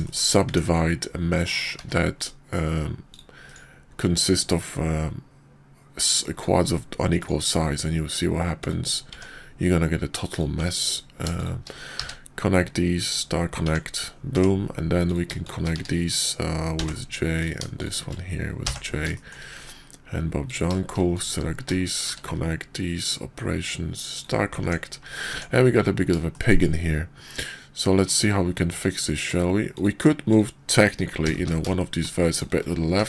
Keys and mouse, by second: 0.0 shift+drag, 0.4 Tab, 1.4 click, 1.7 x, 3.0 click, 3.5-5.5 drag, 7.1-8.7 drag, 9.1 Tab, 10.3 click, 10.8 ctrl+click, 11.3 shift+click, 11.9 q, 13.6 Tab, 14.3 Tab, 15.0 click, 15.4 shift+click, 15.7 q, 16.7 j, 17.3 click, 17.8 shift+click, 18.6 j, 19.0 shift+click, 20.4 click, 21.8 shift+click, 22.0 q, 24.6 Tab, 25.3 Tab, 26.3 shift+drag, 28.1-29.3 drag, 29.6 click, 30.3 click, 31.2 g, 32.9 Tab.